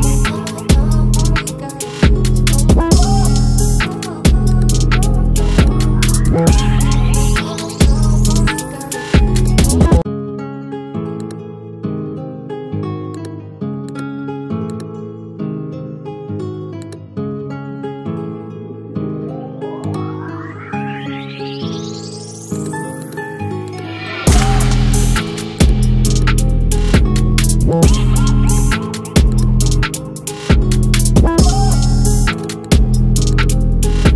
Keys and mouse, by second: 18.5-20.9 alt+drag.